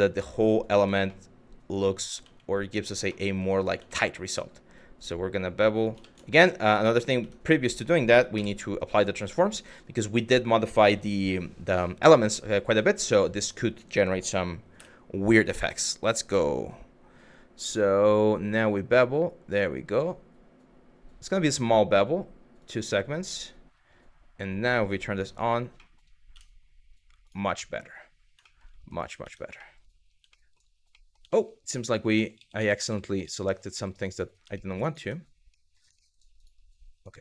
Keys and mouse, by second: 0.7 shift+middle click, 3.6 shift+middle click, 4.4 click, 5.6 ctrl+z, 6.0 q, 6.4 click, 6.8 Tab, 8.0 ctrl+a, 12.7 2, 14.4 Tab, 18.3 click, 22.2 click, 24.9 click, 25.4 middle click, 26.0 Tab, 26.9 click, 27.3 middle click, 28.1 shift+middle drag, 28.9 Tab, 29.3 shift+middle click, 29.9 shift+middle click, 30.7 middle click, 31.0 shift+middle click, 31.8 ctrl+z, 32.0-33.5 ctrl+z, 33.8 click, 34.2 shift+middle click, 34.5 click, 34.6 Tab, 35.1 middle click, 35.7 shift+middle click, 36.9 click.